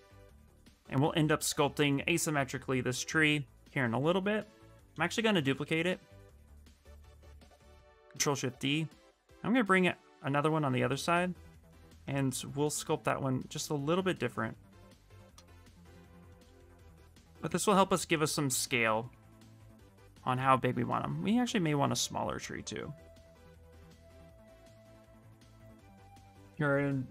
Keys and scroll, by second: 5.1 ctrl+shift+d, 5.6 w, 23.9 q.